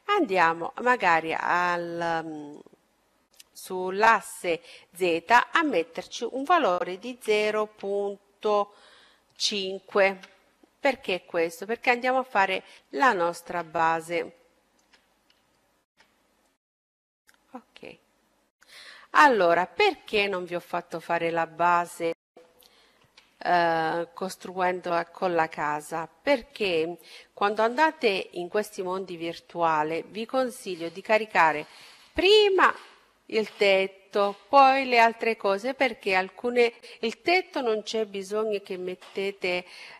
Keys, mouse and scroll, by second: 0.4-2.3 drag, 3.2-5.1 drag, 11.5-12.9 scroll up 1, 12.9-17.3 middle drag, 16.5-18.4 drag, 19.1-21.6 middle drag, 23.1 z.